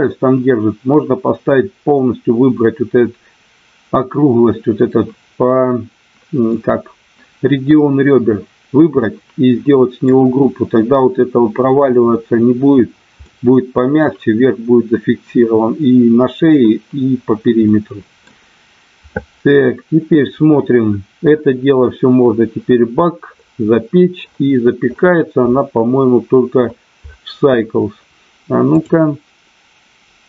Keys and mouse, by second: 9.0-10.1 middle drag, 13.2 middle click, 17.7 middle click.